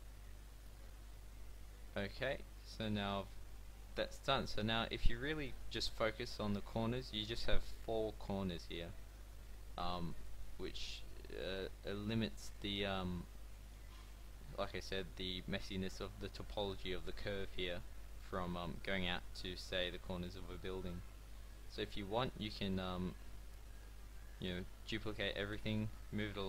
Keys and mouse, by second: 3.7 a, 4.1 a, 4.3 a, 5.0 a, 5.4-7.6 drag, 9.0-10.3 middle drag, 10.8 a, 21.2 a, 23.6 a, 23.6 a, 25.5 shift+d.